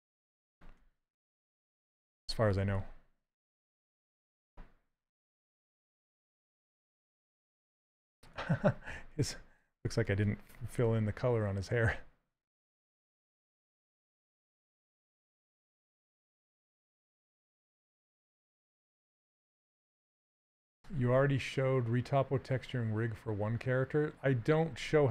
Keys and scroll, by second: 0.9 shift+f, 4.7 z, 6.2-7.2 typing, 12.8 z, 14.5 c, 14.8 z.